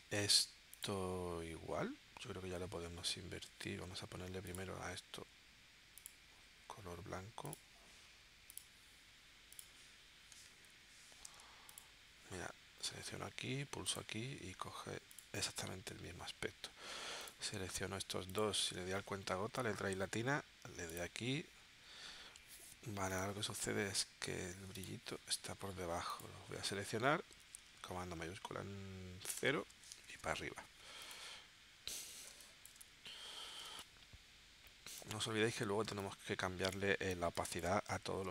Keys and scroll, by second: 2.5 shift+x, 3.6 super+z, 6.8 shift+x, 10.7 i, 14.7 v, 19.5 i, 21.8 v, 23.6 super+y, 29.3 shift+super+0, 30.0 super+y, 32.3 space, 33.6 space, 35.8 space, 38.1 super+s.